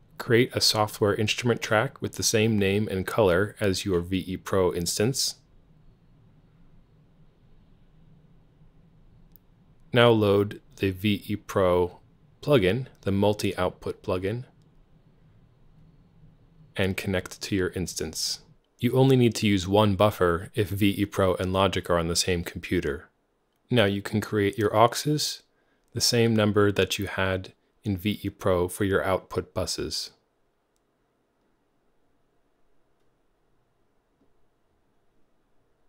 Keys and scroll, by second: 0.0 alt+super+s, 1.5 s, 1.9 Return, 2.8 alt+c, 5.3 alt+c, 18.9 super+w, 20.0 x, 25.6-35.2 typing.